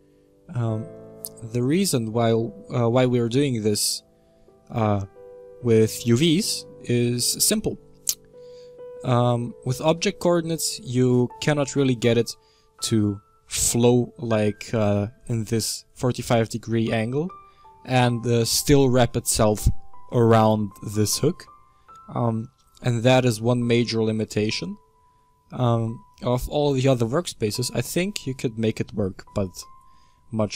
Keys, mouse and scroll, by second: 1.4 Tab, 2.8-3.6 scroll down 17, 3.6-6.6 middle drag, 8.3-9.2 middle drag, 9.2 Tab, 9.8 Tab, 10.8-25.0 middle drag, 25.0 scroll up 1, 25.3 middle click, 25.6-26.3 scroll down 1, 26.3-30.5 middle drag.